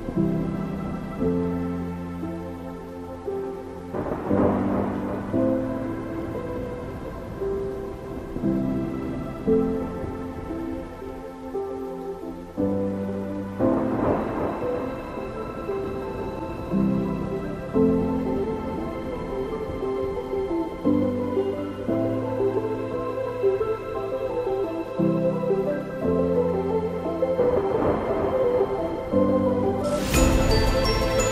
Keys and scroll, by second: 7.4 Up, 9.3 Left, 12.5 ctrl+0.